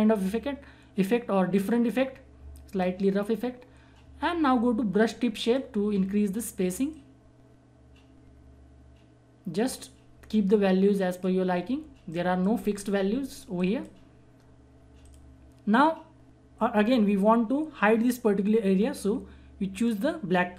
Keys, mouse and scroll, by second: 5.4-13.5 drag, 19.7 click.